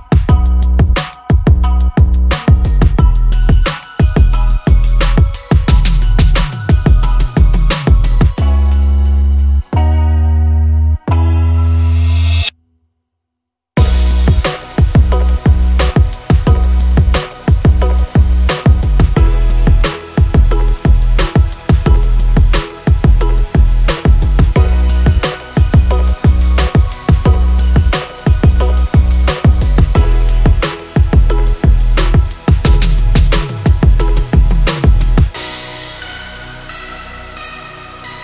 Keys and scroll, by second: 1.1 l, 3.6-5.4 typing, 7.6 space, 12.2 l, 14.1-15.1 typing, 17.1 space, 17.5 p, 20.6 space, 25.3 e, 28.1 space, 28.3 Escape, 33.6 r, 33.9 space, 34.4 r, 36.6-38.2 typing.